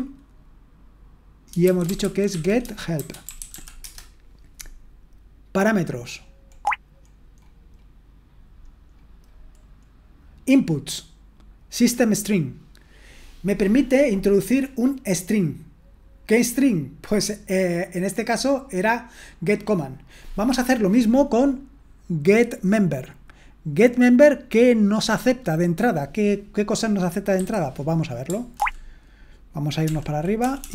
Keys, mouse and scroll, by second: 0.0-0.2 typing, 1.4-4.0 typing, 22.8-26.3 drag, 26.4 click, 27.3 q, 28.5 ctrl+o, 29.8 ctrl+p, 30.4-30.7 typing.